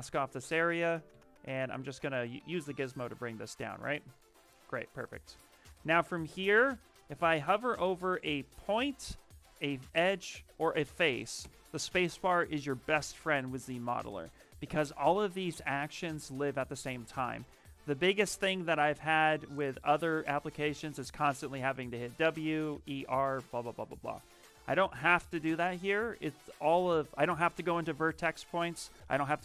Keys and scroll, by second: 3.6 Tab, 4.3 Tab, 4.5 q, 11.3 space, 25.3 space.